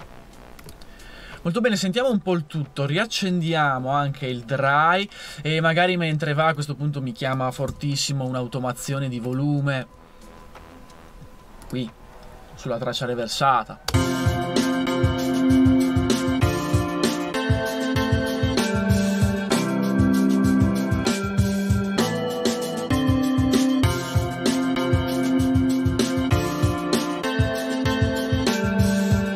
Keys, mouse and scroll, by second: 7.7 a, 13.9 space, 22.2 super+c, 24.8 super+v.